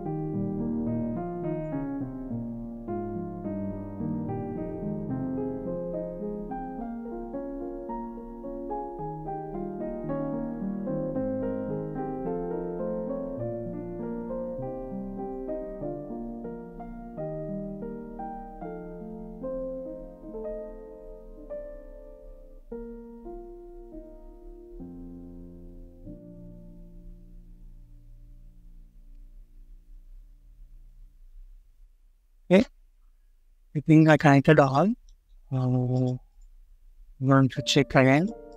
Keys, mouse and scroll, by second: 1.1 scroll up 1, 4.7 scroll down 1, 5.6 typing, 18.2 scroll down 1, 25.3 scroll down 1, 25.6 middle click, 27.9 scroll up 1, 31.3 scroll down 1, 32.1 scroll up 1, 32.9-33.2 scroll down 1, 34.5 scroll down 1, 34.9 middle click, 36.2 double click, 36.8 scroll down 1, 37.4-38.1 scroll up 1, 38.4 double click.